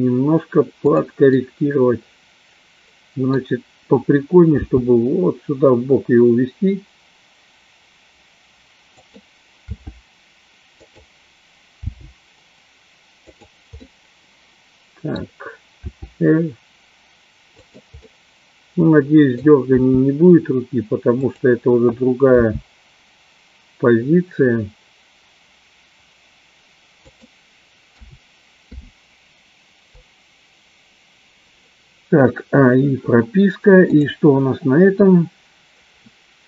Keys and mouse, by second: 1.5-3.5 middle drag, 5.0 g, 10.0 r, 11.2 click, 12.2 g, 13.6 click, 14.0-15.2 middle drag, 15.9 r, 18.2-19.5 middle drag, 20.1 r, 22.4 g, 28.4 a, 29.1 i, 34.0 click.